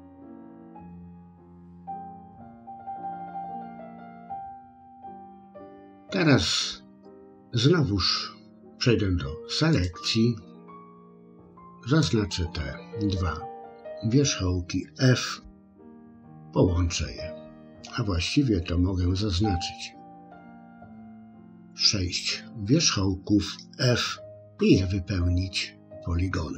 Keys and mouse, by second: 0.7 click, 1.8-2.8 drag, 3.3 click, 4.0 middle click, 4.7 click, 9.8 click, 11.2 click, 15.4 f, 19.5-21.7 drag, 24.4 f.